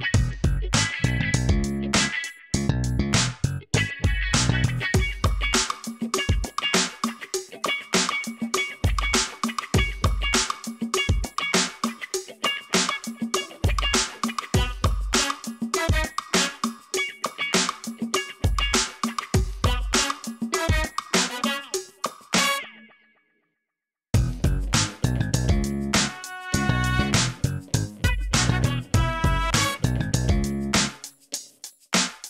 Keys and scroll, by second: 8.1 \, 24.7 Tab, 25.6 shift+s, 26.2 Tab, 26.7 shift+a, 28.1 r, 28.3 x, 28.4 9, 28.6 Return, 28.9 Tab, 29.4 s, 29.5 x, 30.9 s, 31.0 z.